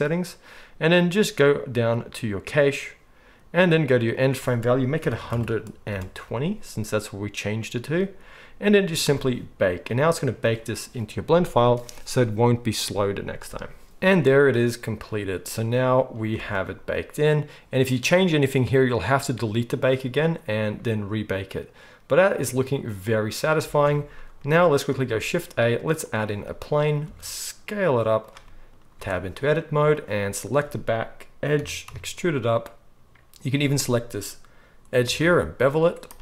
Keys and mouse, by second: 2.6-28.2 drag, 16.4 space, 23.6 space, 25.0 shift+a, 27.0 s, 28.2-29.9 middle drag, 28.9 Tab, 29.9 click, 30.5-33.5 middle drag, 31.6 e, 33.5 click, 33.6-36.2 middle drag, 35.0 ctrl+b.